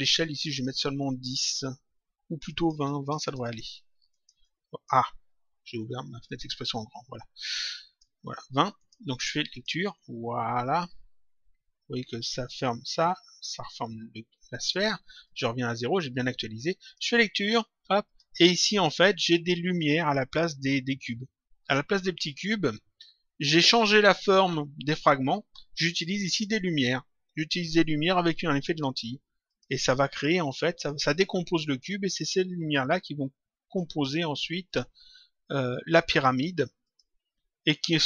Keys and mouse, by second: 0.3 click, 2.4 click, 4.3 click, 6.2 click, 7.4 click, 8.7 click, 14.5 click, 16.7 click, 17.9 click, 19.1 click, 28.6 click, 30.7 click, 33.2 click, 34.6 click, 36.7 click.